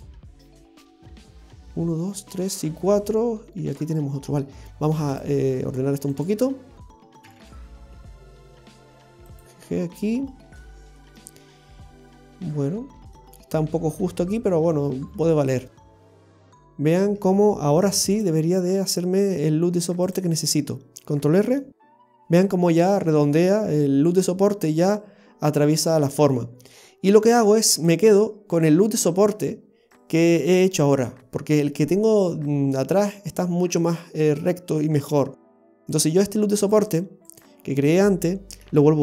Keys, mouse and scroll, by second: 3.8 scroll down 1, 4.5 scroll down 1, 5.1 click, 6.2 right click, 7.3 g, 10.5 scroll down 1, 11.0 middle click, 14.6-16.3 scroll down 2, 16.3 Tab, 16.3 scroll down 1, 17.0 Tab, 18.2 click, 21.2 click, 21.5 ctrl+r, 36.0 right click, 38.7 x.